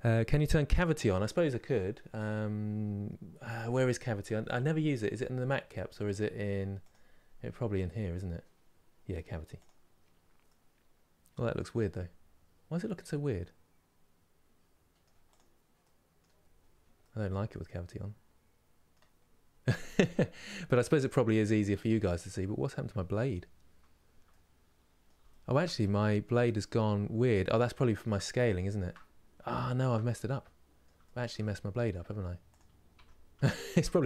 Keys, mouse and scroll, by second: 1.8-3.8 scroll down 1, 3.8-4.9 scroll down 1, 4.9-6.5 scroll down 1, 6.5-10.2 drag, 10.2-15.0 middle drag, 15.0 click, 15.5 middle click, 16.1 scroll up 4, 16.7-19.0 middle drag, 19.0-19.4 scroll down 2, 19.4-20.8 middle drag, 20.8-21.2 scroll down 1, 21.2-22.5 middle drag, 22.5-22.8 scroll up 2, 24.0-25.6 middle drag, 25.6-26.7 scroll up 1, 26.7-27.5 scroll down 2, 27.5-32.2 shift+middle drag, 32.2 click, 32.6 Tab, 33.2-34.0 shift+middle drag.